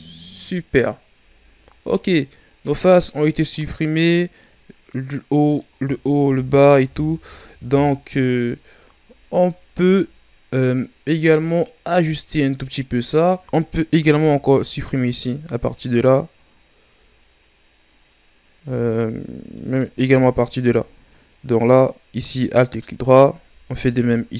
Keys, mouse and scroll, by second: 1.4-1.8 shift+scroll up 2, 2.3 scroll up 1, 2.9-3.5 scroll down 3, 3.5-6.3 middle drag, 6.3 KP_1, 8.8-11.9 scroll up 4, 13.7-14.8 alt+right drag, 14.8-18.0 scroll up 3, 19.5 alt+right click, 20.8-23.9 ctrl+scroll up 3.